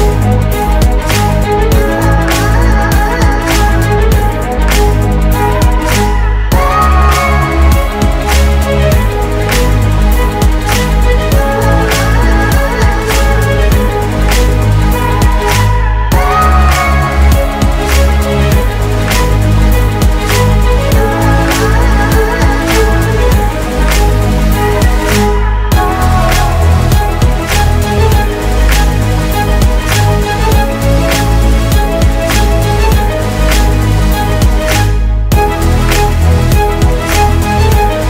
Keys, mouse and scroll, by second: 1.3 Up, 1.9 Down, 6.9 double click, 11.0 ctrl+y, 14.8 ctrl+a, 15.9-16.7 typing, 20.7 typing.